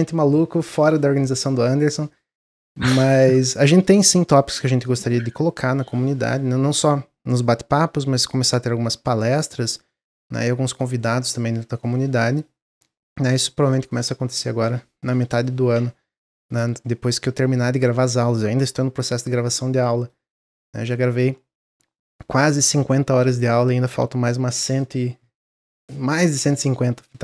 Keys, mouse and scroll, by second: 17.8-18.2 middle drag, 18.2-18.7 scroll down 1, 18.7-19.1 middle drag, 19.1-19.4 scroll down 1, 19.4-20.5 middle drag, 20.5-23.6 scroll up 1, 23.6-23.9 scroll down 1, 23.9-27.1 middle drag.